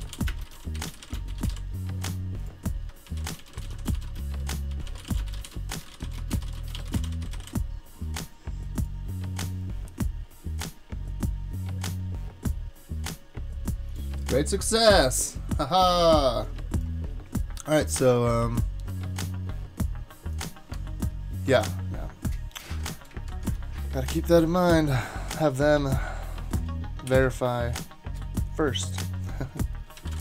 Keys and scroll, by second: 0.0-7.8 typing, 20.7 super+Tab, 23.3 shift+super+Tab, 27.1 shift+super+}, 29.9-30.2 typing.